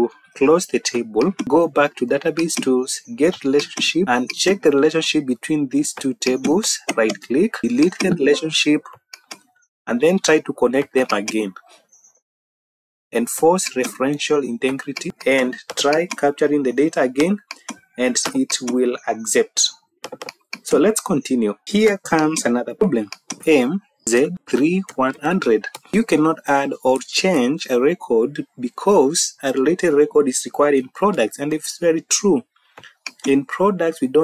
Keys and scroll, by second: 23.4-25.2 typing, 25.6 Tab.